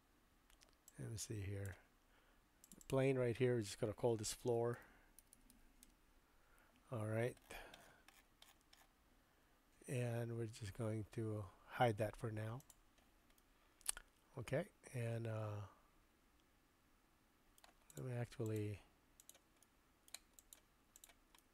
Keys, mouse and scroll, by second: 1.0 click, 2.9-7.0 drag, 5.3 o, 12.6 click, 13.4-17.7 middle drag, 18.5 shift+click, 19.2 shift+click, 19.6 middle click, 20.4 shift+click, 21.4-21.5 middle drag.